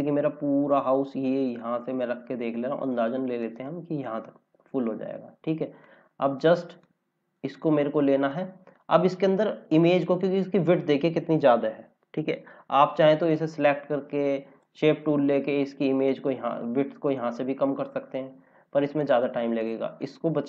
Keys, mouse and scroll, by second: 0.2 click, 9.2 scroll down 1, 11.8-13.2 scroll up 1, 13.2 click, 18.3 ctrl+z.